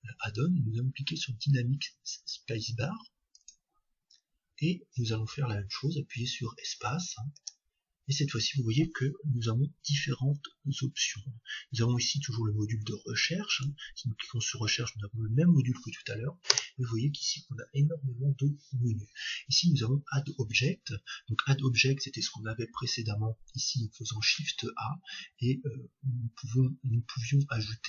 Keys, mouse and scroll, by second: 7.3 space, 16.5 space, 24.2 shift+a.